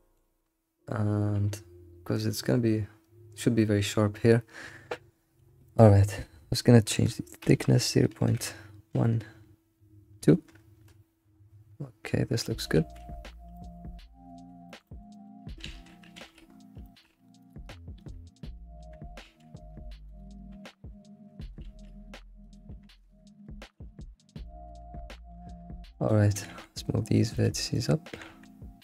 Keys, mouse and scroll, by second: 0.0 alt+shift+z, 0.0 middle drag, 12.1 scroll down 2, 12.4-13.0 middle drag, 13.0-13.5 scroll down 3, 13.5-14.1 shift+middle drag, 14.4 scroll down 2, 15.1 alt+middle drag, 16.8 middle drag, 17.2 scroll up 3, 17.5 click, 18.1 click, 18.9 Tab, 19.2 alt+x, 20.2 click, 20.3 click, 20.5 g, 21.0 g, 21.6 alt+x, 22.5 click, 22.8 g, 23.8 alt+x, 24.4 shift+middle click, 26.1 click, 26.3 g, 28.1 g.